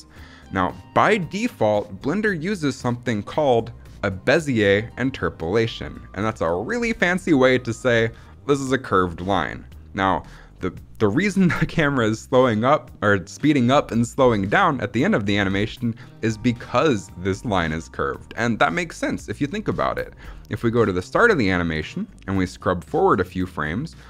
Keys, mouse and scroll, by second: 18.8 middle click, 19.5-19.8 scroll up 2, 19.8 middle click, 20.1-20.7 scroll up 3, 20.7 middle click, 20.9-21.7 scroll up 2, 21.7-24.0 drag.